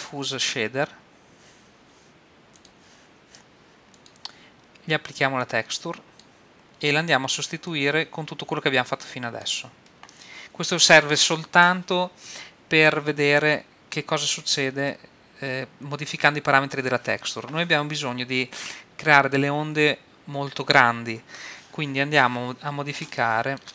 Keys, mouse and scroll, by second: 4.0-7.4 drag, 7.7-9.6 drag, 22.4-23.1 scroll up 1, 23.1-23.7 middle drag.